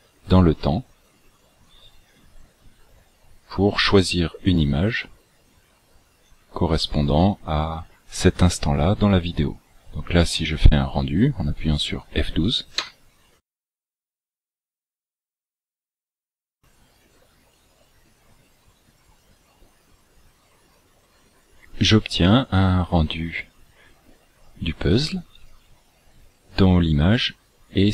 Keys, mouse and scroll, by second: 4.5 click, 6.5 click.